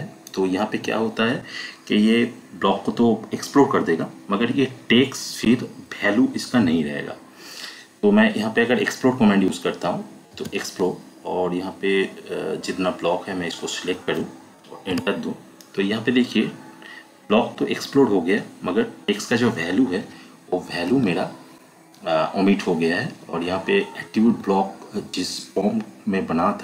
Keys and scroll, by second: 9.3 x, 10.3 space, 14.9 Return, 20.8 Escape, 24.1 Escape.